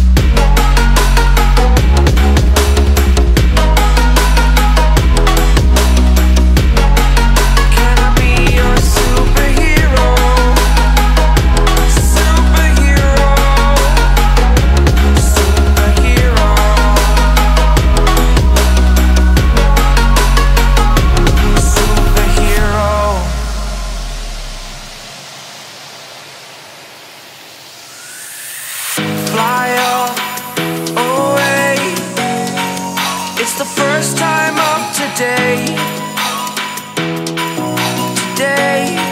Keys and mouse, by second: 7.0-14.8 drag, 14.8 ctrl+z, 16.1-38.4 drag.